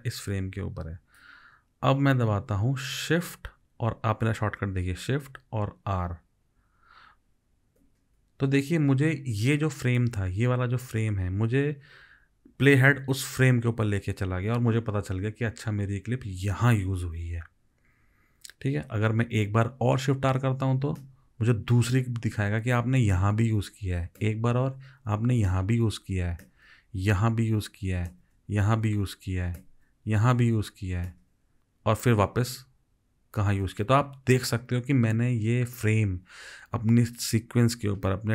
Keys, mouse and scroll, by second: 7.8 shift+r, 21.0 shift+r, 24.2 shift+r, 26.5 shift+r, 28.1 shift+r, 29.6 shift+r, 31.1 shift+r.